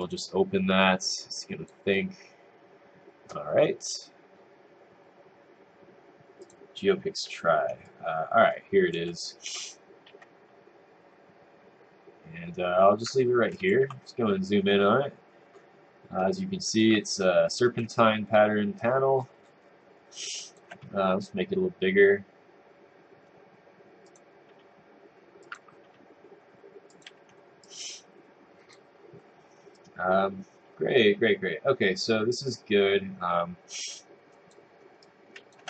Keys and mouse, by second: 7.9 click, 10.1 w, 13.6 click, 16.4 click, 18.0 right click, 20.1 click, 21.2 r, 24.5 r, 25.5 click, 25.8 r, 27.6 click, 29.7 click, 35.0 click.